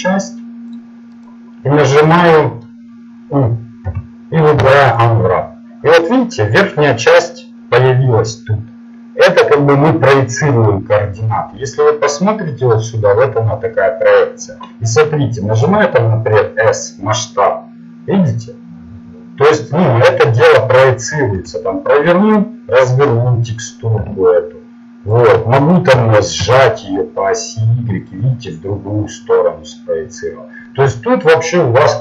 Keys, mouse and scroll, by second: 1.2-2.4 right drag, 2.3 middle click, 3.8 u, 7.7-11.0 middle drag, 15.6 s, 21.4 r, 26.0 s, 28.5-30.3 middle drag.